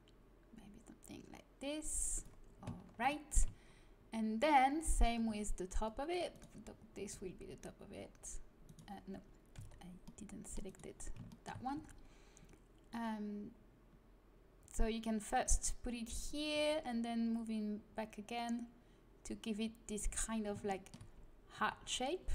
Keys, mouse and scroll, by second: 2.4-5.2 middle drag, 5.2 c, 6.7 middle click, 7.1 g, 9.5 c, 11.0-13.2 middle drag, 11.7 g, 16.5 g, 21.6 g.